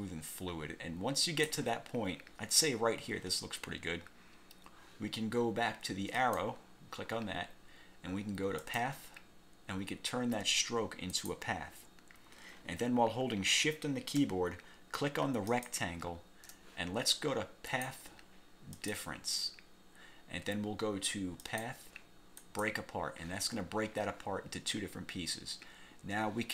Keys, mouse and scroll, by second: 6.3 click, 8.7 click, 11.2 click, 15.6 shift+click, 17.8 click, 18.9 click, 21.5 click, 22.5 click.